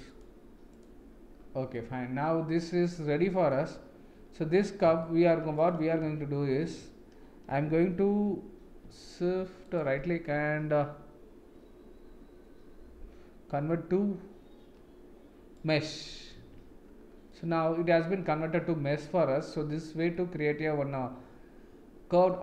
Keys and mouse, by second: 0.1 click, 1.7-2.9 middle drag, 3.1 middle click, 5.0 shift+middle click, 5.5 click, 6.0 Tab, 6.6 Tab, 9.6-15.6 right drag, 16.3 Tab, 17.3-19.0 middle drag, 20.1-22.2 middle drag.